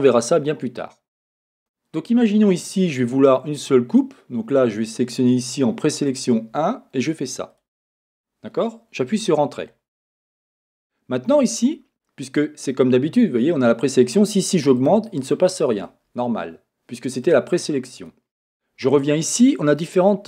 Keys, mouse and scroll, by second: 1.6 Escape, 7.5-16.3 drag, 9.3 Return, 9.7-13.7 scroll up 2, 18.4-19.8 drag.